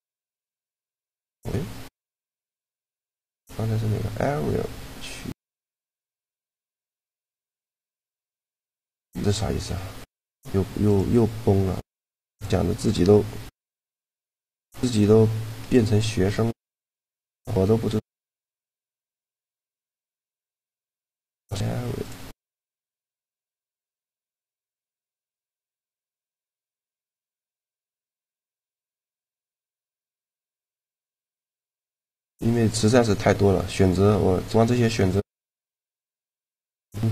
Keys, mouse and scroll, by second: 2.5 shift+g, 7.2-8.9 middle drag, 14.4-18.4 middle drag, 19.6 click, 20.0 shift+g, 20.5 right click, 22.8-24.4 drag, 24.3 right click.